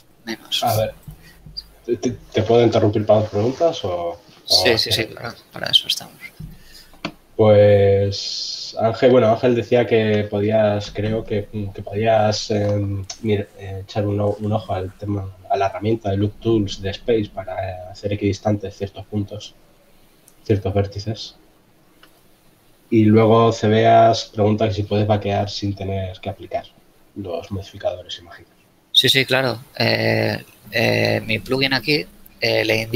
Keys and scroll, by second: 25.1 KP_3.